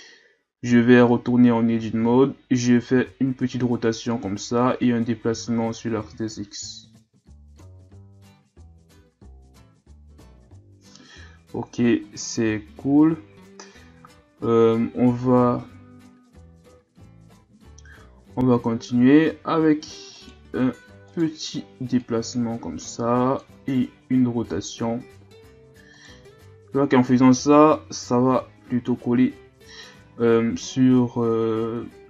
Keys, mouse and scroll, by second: 0.7 Tab, 1.4 scroll up 1, 1.7 a, 2.0 a, 3.0 r, 4.8-7.8 drag, 7.9 Tab, 8.3 a, 8.6-9.1 scroll down 5, 16.4-17.1 ctrl+scroll up 1, 17.1-17.8 shift+scroll up 2, 17.8 scroll up 1, 18.3-19.0 ctrl+scroll up 4, 19.3 Tab, 20.2 alt+right click, 21.1 alt+right click, 22.0-24.4 drag, 24.4 r, 26.5 ctrl+z, 28.2 Tab, 29.1-30.0 scroll down 2, 30.0-32.0 scroll up 4.